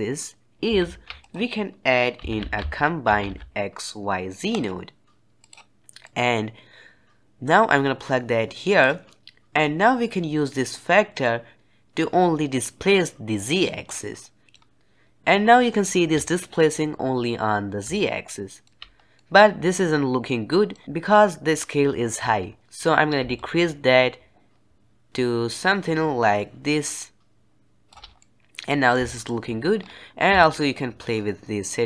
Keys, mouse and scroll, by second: 0.7 shift+a, 5.9-9.0 drag, 9.2-10.3 drag, 11.1-12.1 drag, 14.5 middle click, 14.5-17.0 scroll up 1, 17.0-17.8 scroll down 1, 17.8-18.9 shift+middle drag, 18.9 scroll down 1, 19.1-20.8 middle drag, 20.8-22.6 scroll up 1, 23.3-26.3 shift+drag, 28.1-29.7 middle drag, 29.7-30.3 scroll up 3, 30.3-31.8 shift+drag.